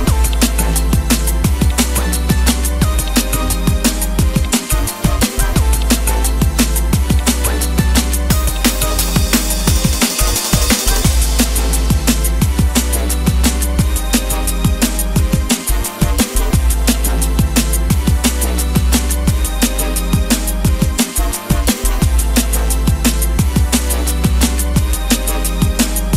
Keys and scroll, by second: 7.9 Escape, 16.4 Escape, 18.9 Escape, 24.4 Escape, 24.6 Escape.